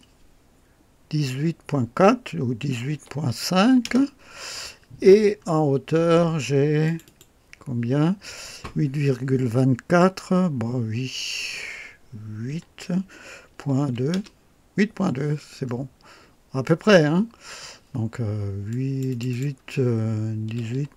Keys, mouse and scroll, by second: 2.6 KP_1, 2.9 KP_8, 3.2 ., 3.6 KP_5, 3.9 Return, 5.1 scroll up 1, 6.8 click, 12.5 KP_8, 13.4 KP_Decimal, 13.8 KP_2, 14.1 Return, 15.6 scroll up 2, 17.2 scroll down 2, 18.7 click, 20.4 KP_1, 20.7 KP_8.